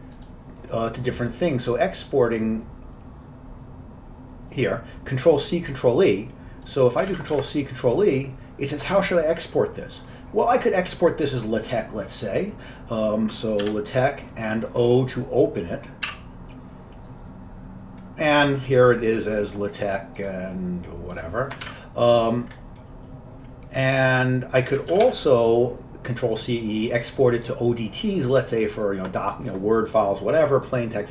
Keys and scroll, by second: 7.2 ctrl+c, 7.4 ctrl+e, 13.7 l, 17.5-18.2 typing, 21.7 ctrl+w, 25.0 ctrl+c, 25.2 ctrl+e.